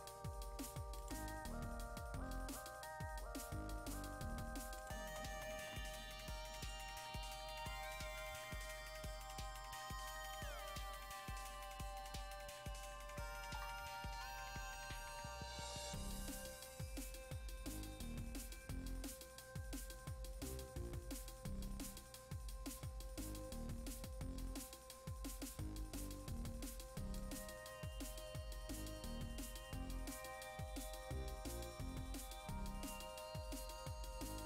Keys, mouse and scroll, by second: 0.9 click, 4.7 click, 6.0 scroll down 1, 6.7 click, 7.9 scroll down 1, 16.5-17.8 scroll down 1, 27.1-34.4 drag.